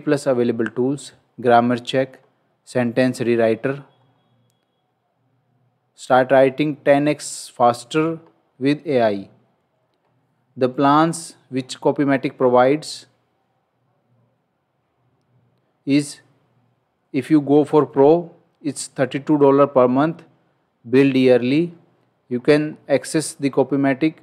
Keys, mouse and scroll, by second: 4.0 scroll down 1, 8.3 scroll down 1, 14.9 scroll down 1, 21.5 scroll down 1, 22.2-22.9 scroll up 1.